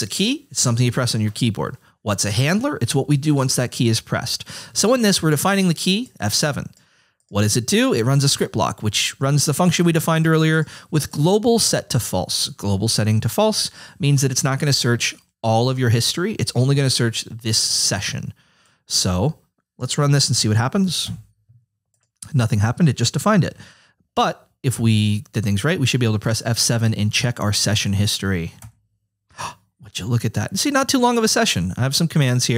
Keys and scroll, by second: 28.6 F7.